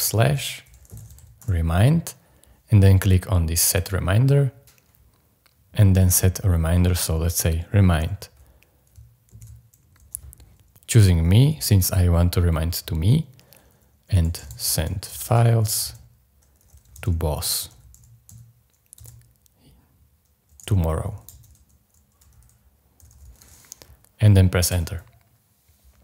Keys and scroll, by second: 0.6-1.9 typing, 9.3 alt+l, 14.0-19.0 typing, 20.4-23.9 typing, 24.7 Return.